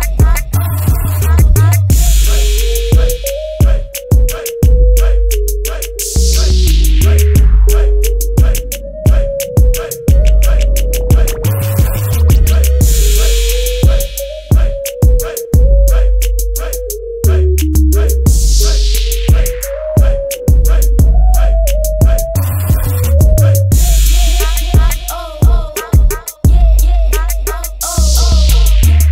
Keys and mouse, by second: 2.9-5.1 drag, 7.0-9.9 drag, 9.9-11.4 middle drag, 11.4-14.6 right drag, 16.2 shift+d, 17.4 p, 25.6-27.4 drag.